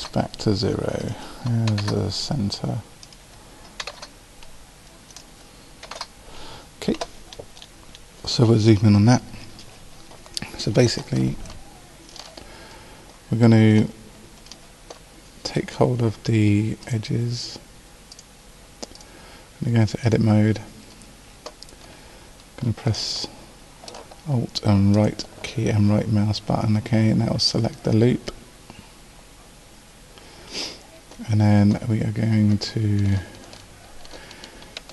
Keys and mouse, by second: 7.3-9.3 middle drag, 16.8-18.6 drag, 26.8 right click.